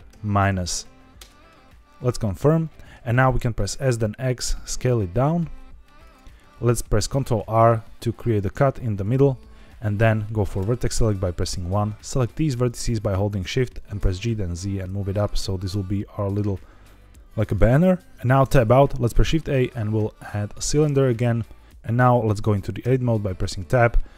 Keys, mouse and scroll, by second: 0.0 KP_Subtract, 1.1 KP_Enter, 2.5 middle click, 3.6 s, 3.8 x, 6.0 click, 7.0 ctrl+r, 9.0 right click, 10.5 1, 11.7 click, 12.4 shift+click, 13.9 g, 14.1 z, 16.1 click, 16.8 middle click, 18.3 Tab, 19.0 shift+a, 21.8 Tab, 22.7 Tab, 23.6 s.